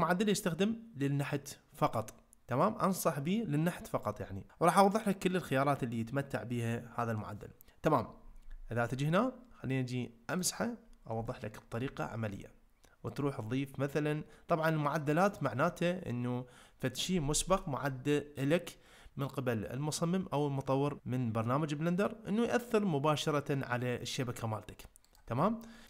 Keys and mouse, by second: 10.3 click, 11.3 ctrl+middle click, 13.2-14.4 drag, 15.4-25.2 drag.